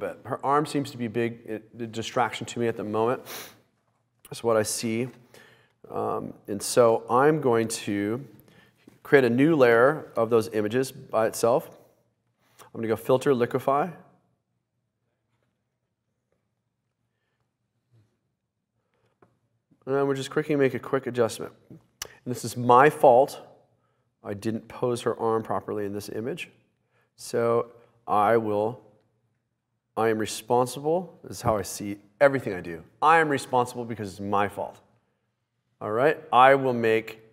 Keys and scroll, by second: 9.7 super+j.